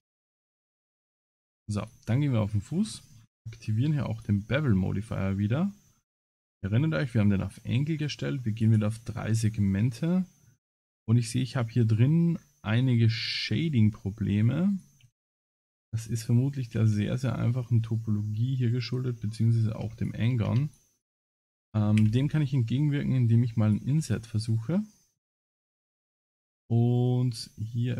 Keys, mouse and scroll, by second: 0.4 click, 1.8 click, 2.5-3.3 scroll down 21, 3.9 scroll down 7, 4.2 click, 4.7 middle click, 6.0 scroll up 4, 6.2 scroll down 1, 6.4 scroll up 4, 7.1 middle click, 8.5 click, 8.7 click, 9.5 scroll down 2, 10.0 middle click, 10.8 shift+middle click, 11.3 middle click, 12.3 scroll down 7, 13.3-14.3 scroll up 12, 14.1 middle click, 14.7 click, 15.1 Tab, 15.3 scroll down 5, 15.8 scroll up 1, 16.7 ctrl+r, 19.9 3, 20.0 click, 20.7 shift+click, 20.9 click, 24.0 Tab, 24.8 middle click, 25.2 Tab, 27.2 ctrl+r.